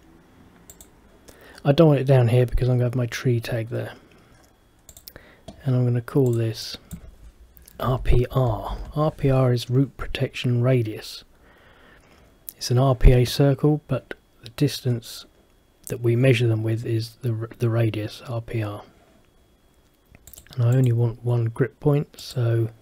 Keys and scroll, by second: 8.2-9.3 typing.